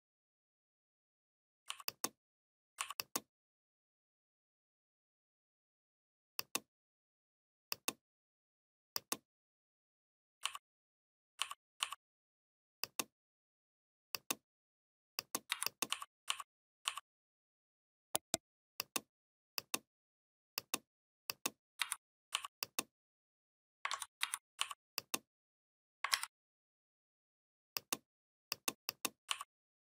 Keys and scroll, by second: 15.3 v, 21.6 v, 23.7 ctrl+z, 24.0 v, 26.0 ctrl+a.